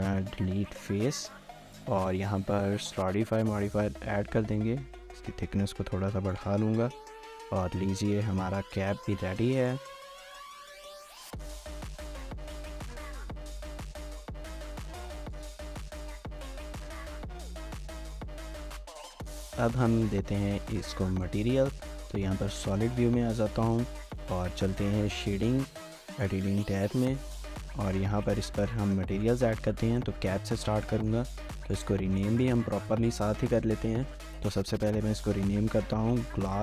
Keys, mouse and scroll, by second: 1.8 Tab, 2.5 3, 4.8 shift+click, 6.9 scroll down 1, 7.2 middle click, 8.5-9.3 typing, 10.0 scroll, 10.2 shift+middle click, 11.0 scroll down 1, 11.1 scroll up 1, 11.4-12.2 scroll, 12.3 shift+middle click, 12.7 scroll up 1, 19.8 scroll down 1, 20.5-21.1 scroll down 2, 20.6 shift+middle click, 21.2 shift+middle click, 21.4 z, 22.2 scroll down 2, 22.5 shift+scroll up 1, 22.8 ctrl+s, 23.0 ctrl+s, 23.2 ctrl+s, 23.4 middle click, 27.4 scroll up 1, 27.6 shift+middle click, 29.0 scroll up 1, 29.1 shift+middle click, 29.6 scroll up 1, 29.9 shift+middle click, 30.4 shift+middle click, 30.5 shift+middle click, 30.8 middle click, 32.3 double click, 33.2 typing, 36.3-36.6 typing.